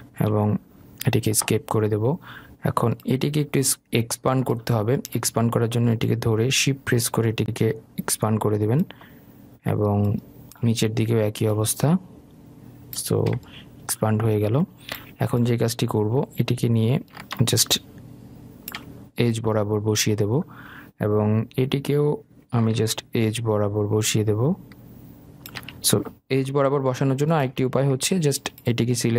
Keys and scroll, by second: 0.4 Escape.